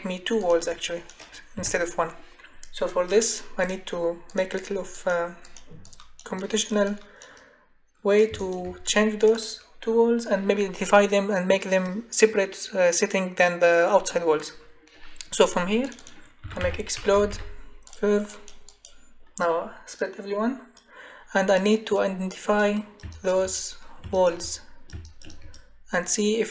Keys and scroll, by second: 1.5 Delete, 16.1-17.8 typing.